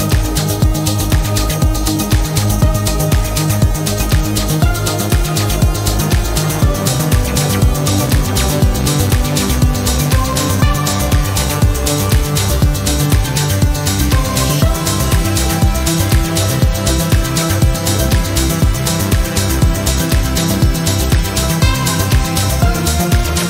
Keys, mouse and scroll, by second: 0.2-0.5 scroll down 2, 1.0-1.4 scroll down 2, 1.9 click, 3.9 click, 4.7 click, 5.4 click, 9.5 click, 10.8-11.2 scroll down 2, 11.7 click, 12.2 right click, 13.5 click, 15.0 click, 16.6-18.7 drag, 19.2 click, 19.6 click, 20.2-21.5 drag, 22.0-22.3 scroll up 2, 22.9-23.3 scroll down 2.